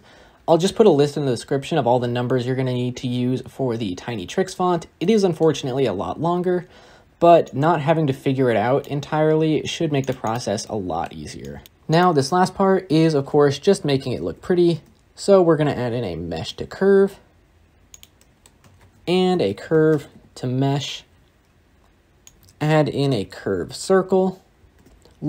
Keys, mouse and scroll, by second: 16.2 shift+a, 20.5 shift+a, 24.7 shift+a.